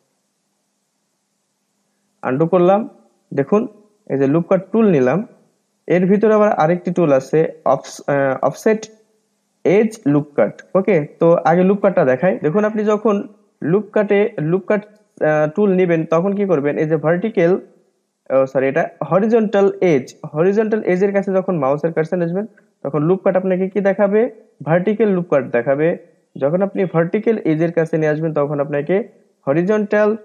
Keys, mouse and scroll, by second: 0.5 ctrl+z, 0.7 ctrl+z, 0.9 ctrl+z, 1.0 ctrl+z, 2.8-3.2 scroll down 1, 3.2-5.0 middle drag, 5.0-8.8 drag, 12.5-13.6 scroll up 3, 13.6-16.6 middle drag.